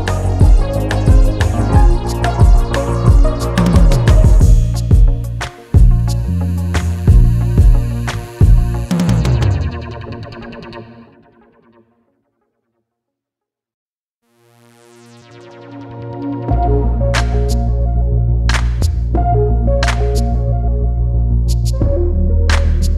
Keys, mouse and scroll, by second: 0.9 KP_1, 1.3 click, 4.2 KP_8, 4.4 KP_0, 4.5 Return, 5.6 click, 7.0 click, 10.0 click, 10.2 scroll up 1, 10.9 click, 13.2 scroll down 1, 14.3 click, 15.4 scroll up 1, 15.9 click, 16.2 right click, 16.5 click, 16.6 right click, 17.2 click, 18.3 scroll up 1, 19.4 Delete, 19.4 click, 19.8 scroll down 1, 21.2 click, 21.8 scroll up 1, 22.6 click.